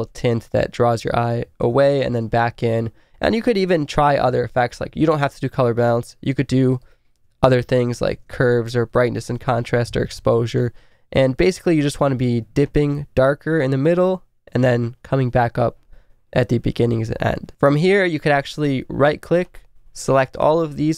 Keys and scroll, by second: 0.1 space, 6.4-9.8 typing.